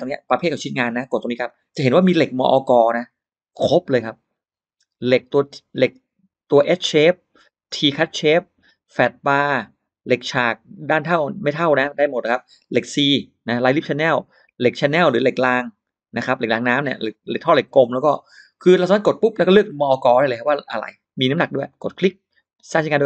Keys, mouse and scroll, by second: 1.3 click, 19.0 click, 19.9 middle click, 21.5 click.